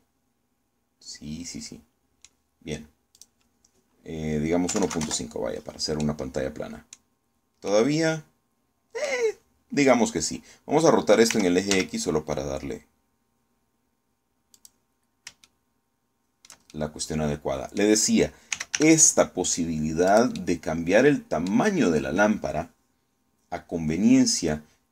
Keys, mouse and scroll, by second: 0.0 click, 0.6-3.1 middle drag, 3.8 click, 5.4 KP_1, 5.5 KP_Decimal, 5.6 KP_5, 5.7 KP_Enter, 6.7-7.8 middle drag, 8.4-9.9 middle drag, 12.0 r, 12.4 x, 15.2 click, 16.1-17.3 shift+middle drag, 17.6-18.6 middle drag, 19.0-19.9 typing, 20.8-22.3 drag.